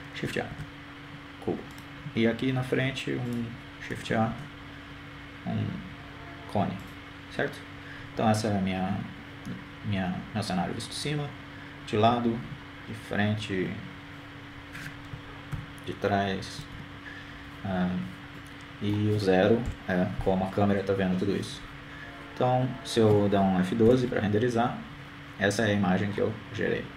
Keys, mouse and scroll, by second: 2.1-3.6 drag, 3.1 shift+a, 5.9-7.4 drag, 6.9 shift+a, 11.6 KP_1, 15.4 KP_3, 18.5 ctrl+KP_3, 19.7 KP_1, 21.3-23.3 middle drag, 22.8 KP_0.